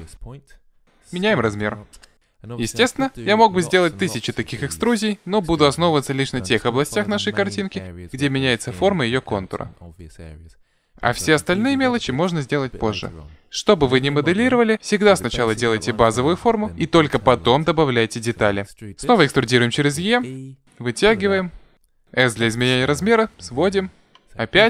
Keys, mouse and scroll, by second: 0.7 s, 18.6 e, 22.1 s, 24.5 e.